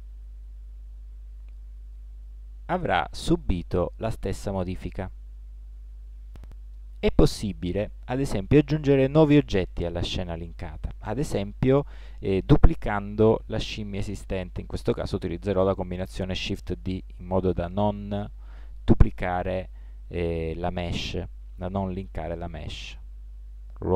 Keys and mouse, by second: 16.5 shift+d.